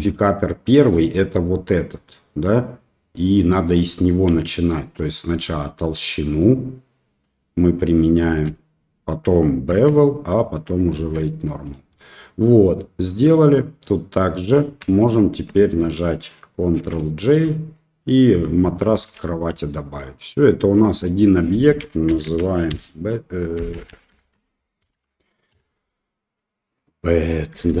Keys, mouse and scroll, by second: 5.3 ctrl+s, 8.2 ctrl+a, 9.7 ctrl+a, 10.9 ctrl+a, 11.4 middle click, 12.5 click, 13.8-14.5 middle drag, 15.0 shift+click, 18.8 ctrl+j, 19.4 middle drag, 20.8 click, 21.0-27.8 drag, 23.7 BackSpace, 23.8 BackSpace, 27.6 BackSpace.